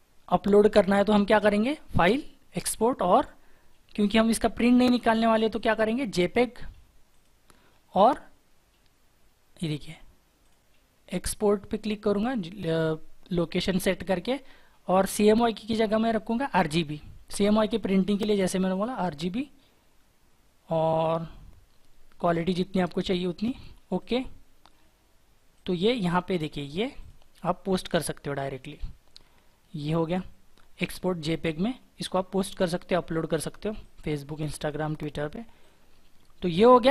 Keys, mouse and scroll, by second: 26.9 double click.